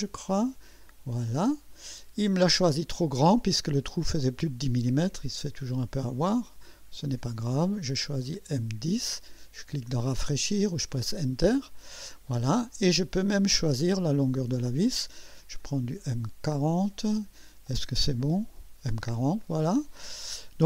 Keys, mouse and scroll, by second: 1.2 click, 5.2 click, 7.0 click, 7.6 click, 8.6 click, 10.9 click, 14.0 click, 14.5 click, 15.6 click, 18.3 Return, 19.4-20.2 drag.